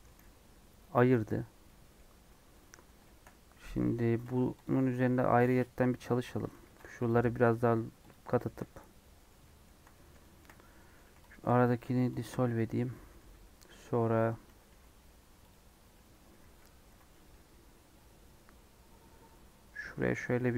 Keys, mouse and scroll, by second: 0.1 g, 1.0 middle click, 1.3 Tab, 1.6-2.7 middle drag, 2.7 3, 3.0 shift+middle click, 3.3 scroll up 1, 3.5 middle click, 4.0 ctrl+r, 6.6 ctrl+r, 8.4 shift+middle click, 8.6-8.9 scroll up 2, 8.9-10.4 middle drag, 10.4 scroll up 2, 10.8 middle click, 11.3 click, 12.1 x, 12.9 middle click, 13.3 3, 13.4-13.8 scroll down 3, 13.8 scroll up 4, 14.6 ctrl+r.